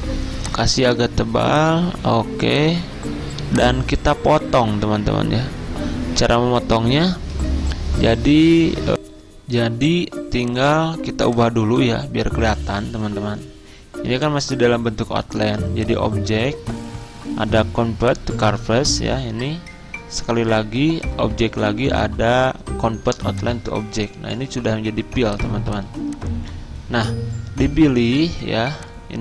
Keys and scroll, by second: 8.9 F9, 8.9 alt+Tab.